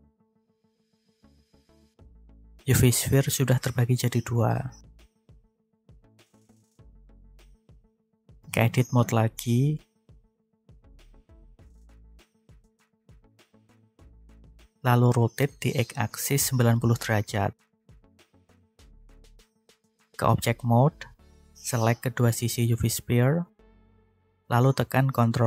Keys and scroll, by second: 1.6 g, 6.1 ctrl+z, 7.8 Tab, 10.3 a, 14.3 r, 15.5 x, 16.8 0, 17.9 Return, 19.6 Tab, 23.9 ctrl+j.